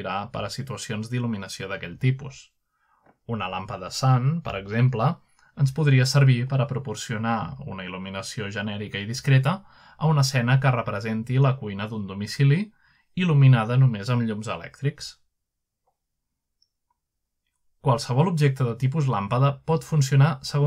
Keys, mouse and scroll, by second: 0.1-0.7 middle drag, 0.1-1.4 scroll down 1, 1.4 click, 2.9-4.0 typing, 3.1-4.2 middle drag, 5.6 click, 8.1 click, 9.3 middle click, 10.0 typing, 10.4 click, 11.6-12.7 typing, 12.5 Return, 13.7-14.6 scroll up 1, 14.6-15.1 scroll down 1, 14.9-16.3 middle drag, 16.3-18.3 drag, 19.3 g, 20.0 click.